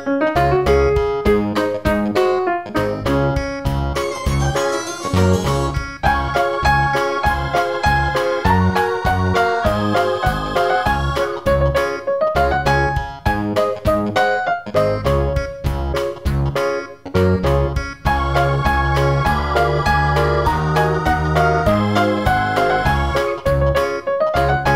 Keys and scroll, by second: 13.1 o.